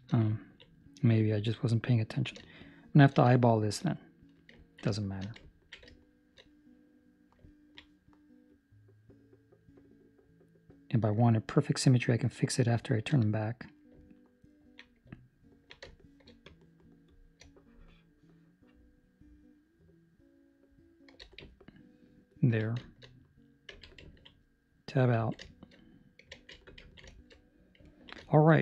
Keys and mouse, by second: 0.2 ctrl+middle click, 0.8 middle click, 1.4 ctrl+middle click, 2.4 shift+middle click, 3.3 ctrl+middle click, 3.9 middle click, 4.5 ctrl+middle click, 4.9 shift+middle click, 5.4 ctrl+middle click, 5.9 shift+middle click, 6.7 middle click, 7.4 ctrl+middle click, 8.4 click, 13.4 middle click, 14.0 ctrl+middle click, 15.1 middle click, 15.8 shift+middle click, 16.0 shift+middle click, 16.4 click, 17.0 click, 21.4 ctrl+middle click, 22.2 ctrl+middle click, 22.8 shift+middle click, 23.0 shift+middle click, 23.6 Tab, 24.0 ctrl+middle click, 24.2 middle click, 25.1 ctrl+middle click, 25.6 shift+middle click, 26.3 alt+a, 26.7 ctrl+middle click, 27.2 shift+middle click, 27.6 middle click, 28.0 ctrl+middle click, 28.2 shift+middle click, 28.5 middle click.